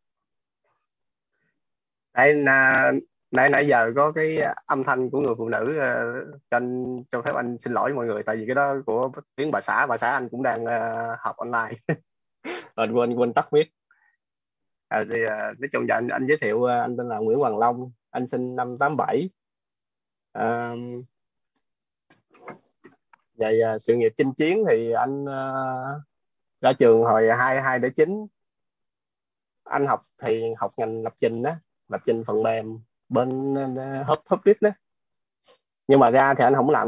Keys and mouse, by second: 0.1 click, 15.3 click, 31.7 click, 34.0-36.8 typing.